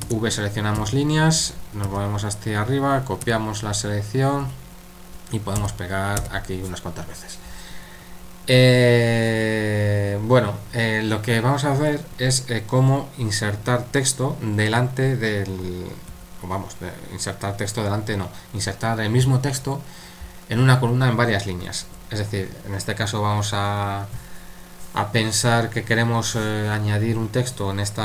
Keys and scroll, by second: 0.1-0.8 typing, 1.9 typing, 3.2 typing, 4.4 typing, 5.6-6.2 typing, 16.1 super+1, 21.9 super+3.